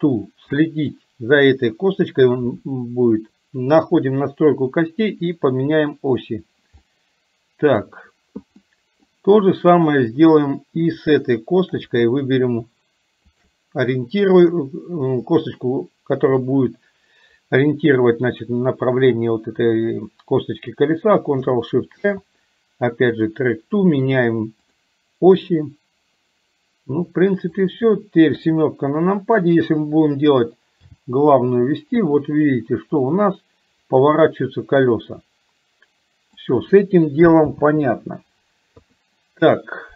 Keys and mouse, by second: 0.7 middle click, 3.9 click, 5.8 click, 6.9-7.9 middle drag, 8.7 middle click, 9.8 click, 12.0 click, 13.3 shift+click, 27.5 click, 28.4 KP_7, 30.9 g, 37.7 ctrl+z, 38.8 KP_3.